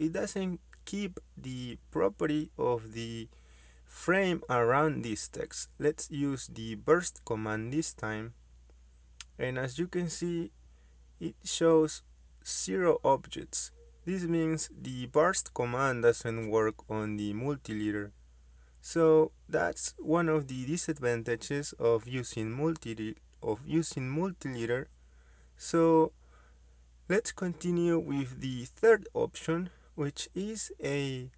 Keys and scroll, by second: 0.9 Escape, 1.8 Escape, 3.4 Escape, 4.6 ctrl+z, 6.4-7.9 typing, 8.9 Return, 13.4 Return, 15.8 Escape, 20.0 m, 20.2 space, 21.5-23.1 typing, 23.1 Return, 27.8 Escape.